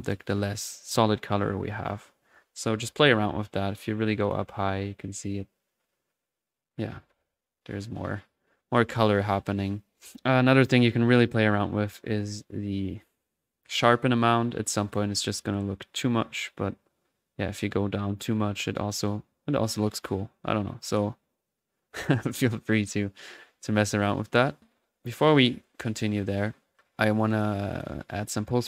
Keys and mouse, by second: 3.6 ctrl+z, 3.6-7.3 ctrl+drag, 8.9 ctrl+z, 10.0 click, 12.4-22.9 drag, 24.1 click, 24.4 click, 24.5-25.7 middle drag, 25.7 click, 26.2-26.8 middle drag, 26.8-27.9 drag, 27.5-28.4 typing, 28.0 middle click.